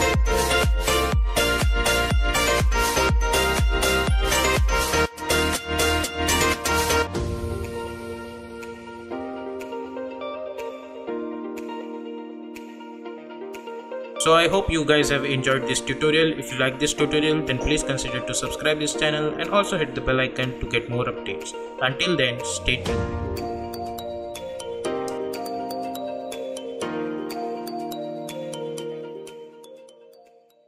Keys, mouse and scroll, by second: 1.6 space, 2.2 click, 3.1 space, 6.8 space.